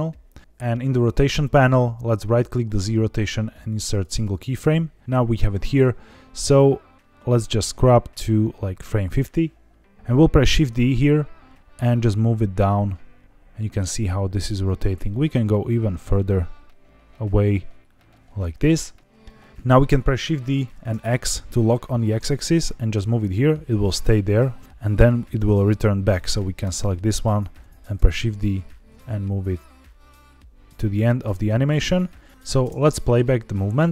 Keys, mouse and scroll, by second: 0.4-1.4 drag, 2.3 right click, 7.6-9.0 drag, 9.9 click, 10.4 shift+d, 14.3 click, 14.6-15.0 scroll down 3, 15.0 middle click, 15.6 g, 18.5 click, 20.5 shift+d, 20.8 x, 25.2 click, 26.5 click, 26.9 scroll up 2, 27.9 shift+d, 28.8 x, 30.7 click, 32.3 click, 32.6 space.